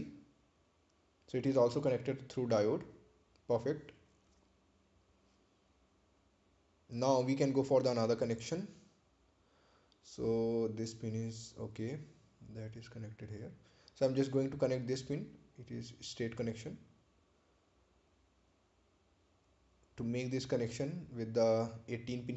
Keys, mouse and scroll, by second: 3.5 click, 10.3 right click, 11.7 ctrl+click, 13.4 ctrl+click, 16.3 click.